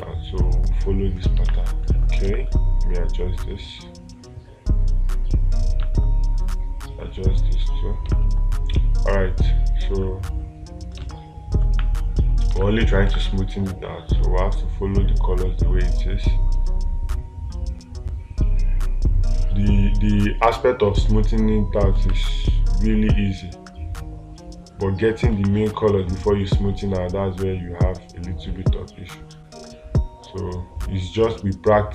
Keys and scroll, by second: 1.9 space, 11.5 space, 22.4 space, 25.8 space.